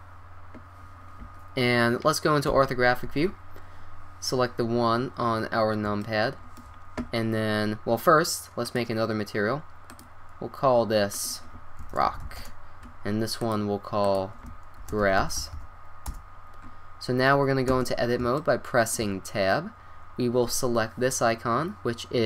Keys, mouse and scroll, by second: 2.5 KP_5, 3.0 KP_1, 8.7-13.1 drag, 13.4-15.5 drag, 15.5 s, 17.8 Tab, 20.2-20.9 middle drag.